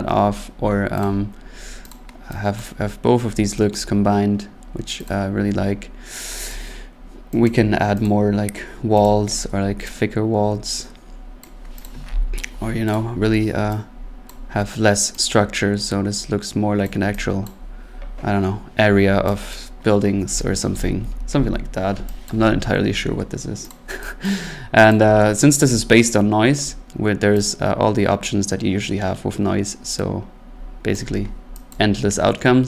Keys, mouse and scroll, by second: 1.0 click, 1.9 click, 2.6 click, 5.1 click, 6.5 click, 7.5 click, 8.1 click, 9.0 click, 11.4 click, 11.8 click, 12.1 ctrl+z, 12.9 click, 14.3 click, 16.8 click, 17.5 click, 19.5 click, 21.0 ctrl+z, 21.3 ctrl+z, 22.3 click, 23.7 click, 24.3 click, 24.9 click, 30.9 click, 31.7 click.